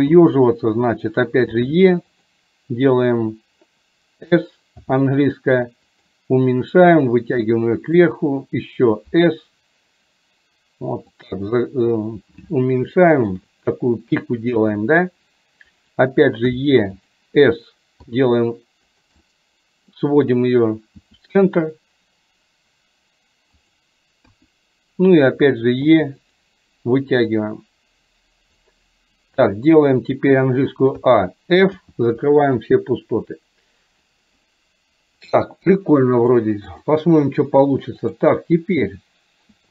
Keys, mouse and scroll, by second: 6.9-8.2 drag, 13.1 shift+middle click, 19.2 middle click, 27.4-28.6 drag, 36.2 click, 38.2 drag.